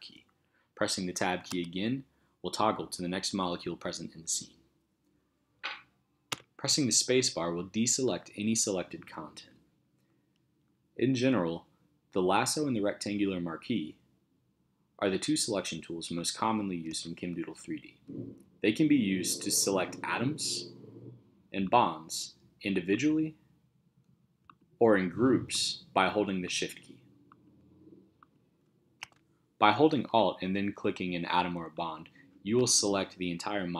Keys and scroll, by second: 1.5 Tab, 6.3 space, 16.9 space, 29.0 shift+space, 29.7 space.